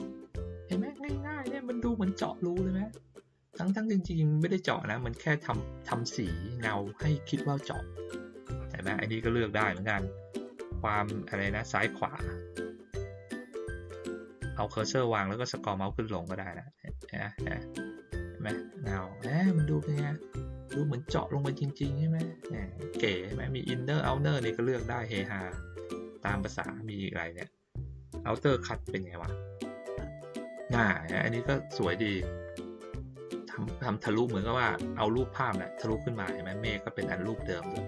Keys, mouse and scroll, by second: 9.7 click, 10.5 middle click, 11.8 middle click, 12.3 middle click, 13.7-15.6 middle drag, 15.6-16.2 scroll up 1, 16.2-16.7 scroll down 1, 16.7-18.1 scroll up 1, 24.4 click, 28.4 click.